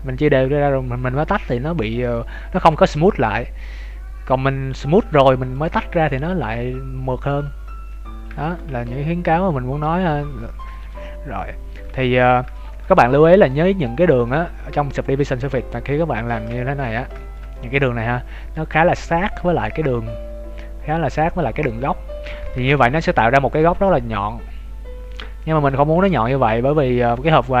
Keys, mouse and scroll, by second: 5.5 click, 7.7 scroll up 2, 8.0-8.5 scroll down 3, 8.3 shift+middle click, 8.6 Tab, 9.1 scroll up 1, 9.4 scroll down 1, 9.8 middle click, 10.7 shift+middle click, 11.1 scroll up 1, 12.1 scroll down 1, 12.5 shift+middle click, 13.3 alt+right click, 14.2 middle click, 16.5 shift+middle click, 17.1 middle click, 17.5 middle click, 19.8 scroll up 1, 20.4-21.0 scroll up 7, 21.1-21.7 scroll down 3, 21.7 scroll down 2, 22.5 shift+middle click, 22.5-22.8 scroll down 7, 22.8 Tab, 22.9-23.5 scroll up 1, 23.5 middle click, 25.7 Tab, 25.9 scroll up 1, 26.8 scroll down 2, 27.1-27.6 scroll up 1.